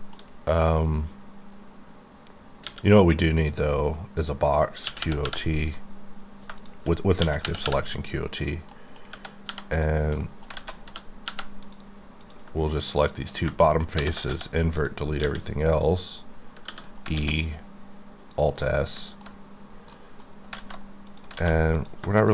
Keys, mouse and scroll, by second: 0.6 scroll up 2, 2.3-2.6 scroll down 2, 2.6 a, 3.9 scroll down 7, 4.1-4.8 scroll up 7, 4.8-5.2 typing, 7.2 q, 7.6 t, 8.3 click, 8.7 middle click, 9.4 3, 9.7 click, 10.2 middle click, 10.5 alt+z, 10.7-11.7 typing, 11.6 click, 12.2 click, 12.4 shift+click, 13.9 ctrl+i, 14.3 x, 14.8 click, 15.2 a, 16.6 e, 16.8 right click, 17.1 alt+s, 18.3 click, 18.5 middle click, 18.7 middle click, 19.6-20.0 scroll up 2, 19.9 middle click, 20.0 middle click, 20.5 alt+z, 21.1 click, 21.3 alt+z, 21.7 click.